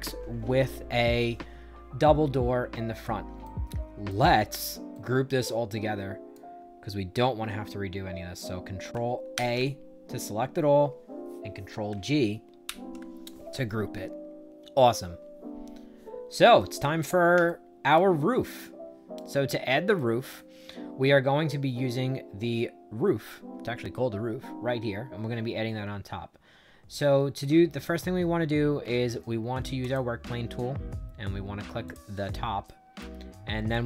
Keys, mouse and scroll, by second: 2.9 click, 3.3 right click, 4.3 middle click, 4.8-6.2 right drag, 9.2 ctrl+a, 12.5 ctrl+g, 16.5 right click, 17.4 shift+right click, 18.4 right click, 19.9 right click, 29.7 click, 31.8 click, 32.6 right click, 33.6-33.8 drag.